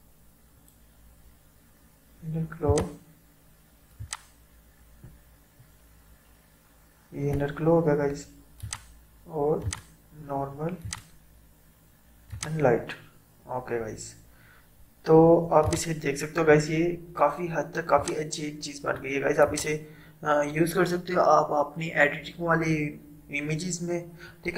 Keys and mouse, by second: 2.7-8.7 drag, 15.7 click, 18.0-19.5 drag.